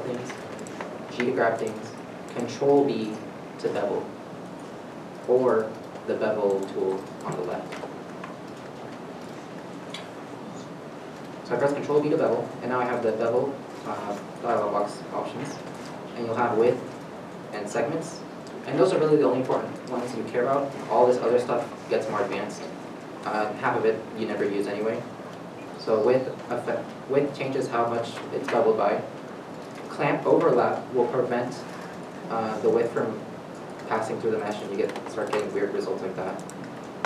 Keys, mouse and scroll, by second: 0.4 right click, 1.1 g, 2.0 right click, 3.2 ctrl+b, 5.3 right click, 11.3 right click, 11.5 ctrl+b, 35.2 middle click.